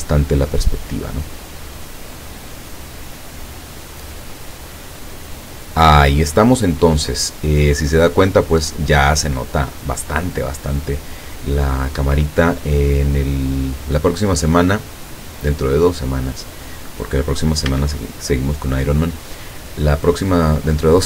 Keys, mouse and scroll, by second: 12.0 Escape, 12.7 middle click, 14.0-14.6 scroll up 2, 17.7 a.